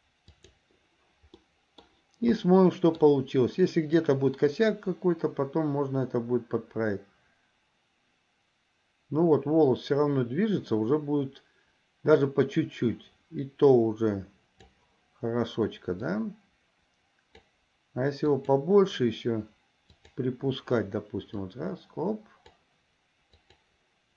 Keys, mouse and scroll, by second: 0.6 click, 1.5 middle click, 2.6 middle click, 4.2-15.1 drag, 16.3-17.6 drag, 18.5 click, 20.1 click, 21.4-22.7 drag, 23.6 click.